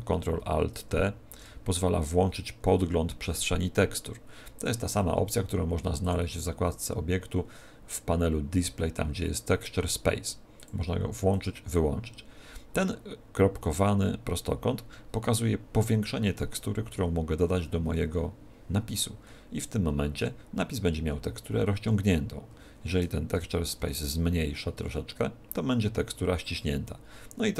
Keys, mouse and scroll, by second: 0.8 alt+shift+t, 4.6 click, 6.0 click, 10.5 click, 11.2 click, 23.7 alt+shift+t.